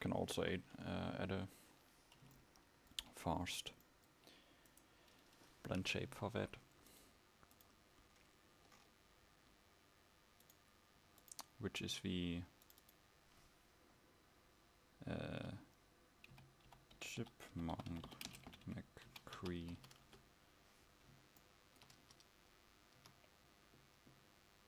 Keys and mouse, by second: 0.0 Escape, 0.8 KP_1, 10.8-22.1 drag, 22.1 Tab, 22.1 e, 23.1 a.